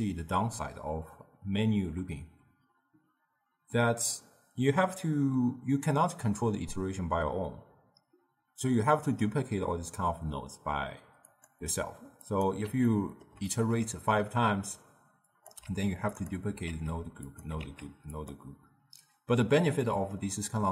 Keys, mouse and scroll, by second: 11.3-12.4 drag, 12.9-15.4 ctrl+middle drag, 15.4 click, 15.7 shift+d, 16.8 shift+d, 17.7 shift+d, 19.9-20.7 middle drag.